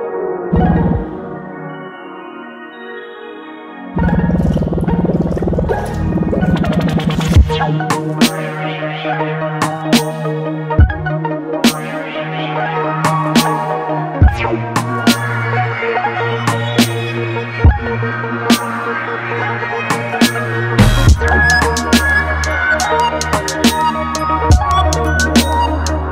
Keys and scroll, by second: 20.8 ctrl+c, 21.1 ctrl+v.